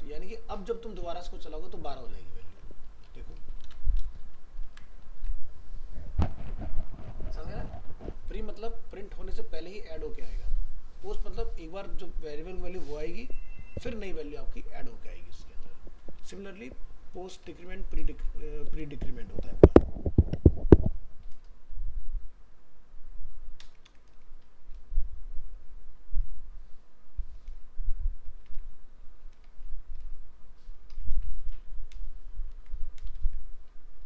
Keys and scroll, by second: 2.5 alt+Tab, 3.6 ctrl+c, 4.1 ctrl+Return, 4.2 ctrl+v, 4.6 ctrl+s, 5.2 alt+Tab, 16.2 alt+Tab, 18.6 ctrl+c, 23.9 ctrl+v, 31.1 ctrl+c, 32.5 ctrl+z, 33.1 ctrl+Return, 33.2 ctrl+v.